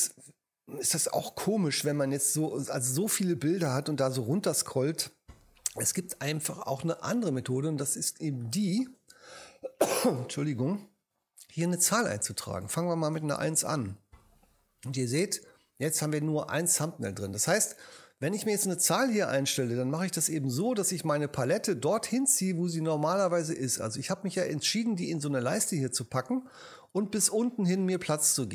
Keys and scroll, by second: 13.4 1.